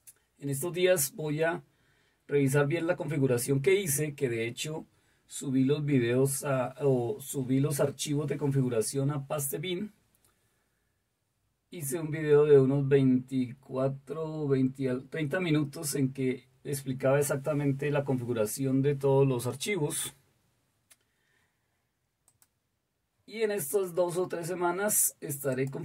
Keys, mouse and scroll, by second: 22.2 click, 25.5 click.